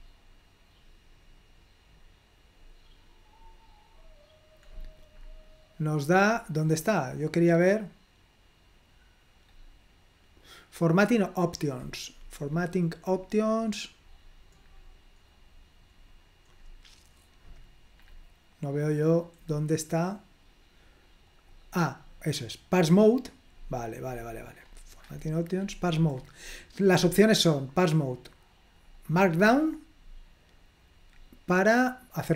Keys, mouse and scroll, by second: 0.9-1.7 scroll down 2, 2.1-2.4 scroll down 2, 2.6-3.2 scroll down 2, 3.5-3.9 scroll down 2, 4.1-4.7 scroll down 2, 4.9-5.9 scroll up 2, 11.1-11.6 scroll down 2, 12.5-17.2 scroll down 8, 18.1-18.6 scroll up 2, 19.5-20.0 scroll up 2, 21.3 click, 23.6-28.0 scroll up 2, 28.9-29.9 drag, 29.9-30.7 scroll up 1, 31.2-31.8 scroll down 2.